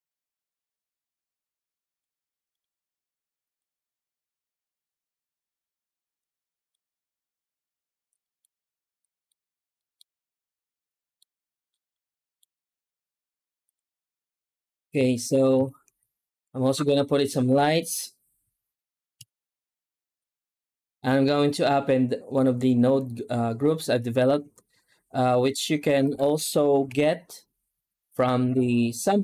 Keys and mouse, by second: 0.4-1.8 drag, 6.5 middle click, 8.1 middle click, 8.9 middle click, 9.6 middle click, 10.7-11.1 middle drag, 11.8-12.2 middle drag, 12.7 z, 15.4 ctrl+s, 19.0 F4, 25.9 right click, 26.7 g.